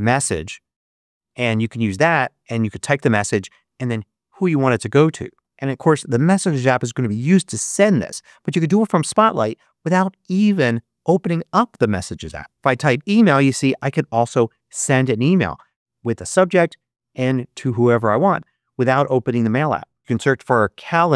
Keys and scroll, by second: 0.0-0.4 typing, 1.1 Return, 12.5 l, 13.6 Return, 19.7-21.1 typing.